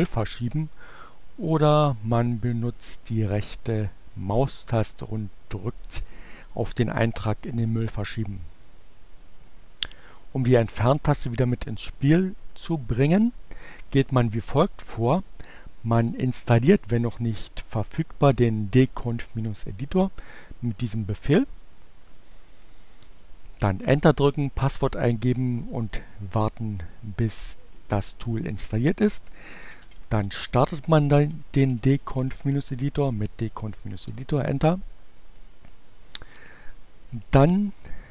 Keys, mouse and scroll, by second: 0.5 click, 1.5 right click, 8.5 click, 13.7-15.1 drag, 21.0 click, 26.1 BackSpace, 28.6-29.8 typing, 31.0-32.6 typing, 33.8 Return, 36.0 click.